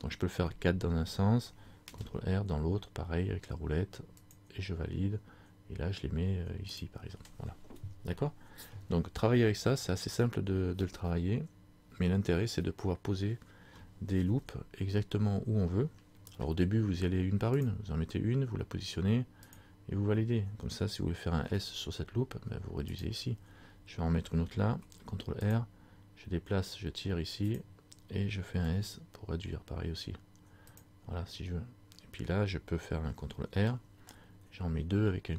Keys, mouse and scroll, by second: 2.0 ctrl+r, 6.9 click, 14.4 ctrl+z, 16.5 ctrl+r, 24.9 ctrl+r, 30.9 click, 33.6 ctrl+r.